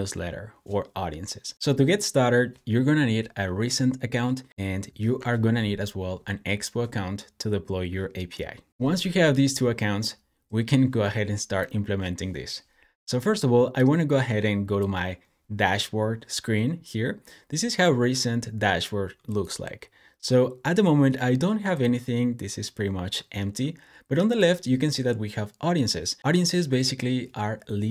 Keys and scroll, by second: 4.8 shift+super+].